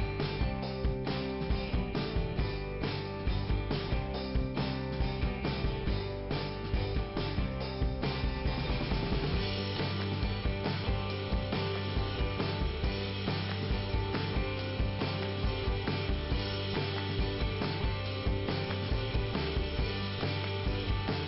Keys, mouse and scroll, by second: 0.6 click, 4.9 click, 5.4 click, 5.8 click, 6.0 right click, 6.1 double right click, 6.6 double right click, 7.7 click, 11.7 scroll up 2, 15.9 click, 17.8 click, 20.4 click, 20.6 click, 20.8 click.